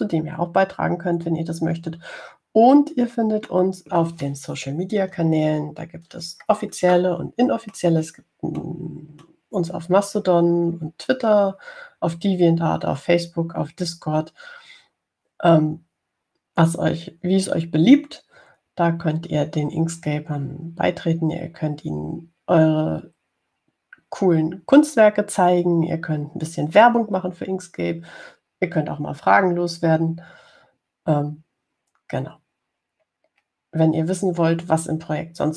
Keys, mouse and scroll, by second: 4.7 middle click, 5.1 click, 5.3 middle click, 6.7 ctrl+scroll up 2, 8.2-9.5 drag, 9.9 middle click, 34.2-35.0 scroll down 4.